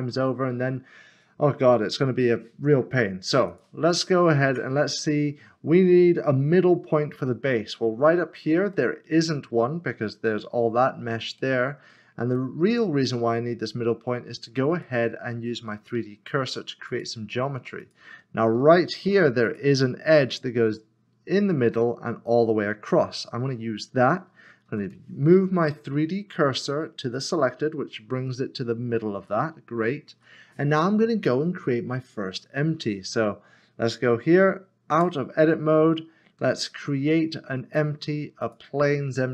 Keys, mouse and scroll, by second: 3.5 shift+middle click, 3.6 click, 4.5 Tab, 7.7 Tab, 7.9 middle click, 11.4 shift+middle click, 12.3 shift+middle click, 13.0 middle click, 14.8 shift+middle click, 16.9 click, 19.0 2, 19.5 click, 20.7 middle click, 24.2 middle click, 26.7 s, 27.1 click, 29.2 click, 29.5 middle click, 30.3 scroll down 1, 31.4 middle click, 34.9 Tab, 36.4 a, 38.4 click.